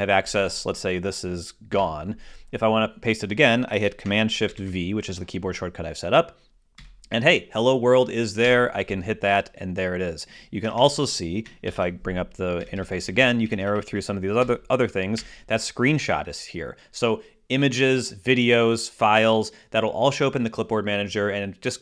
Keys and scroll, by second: 4.3 shift+super+v, 11.3 shift+super+Return, 11.5 shift+super+v, 12.4 shift+super+Down.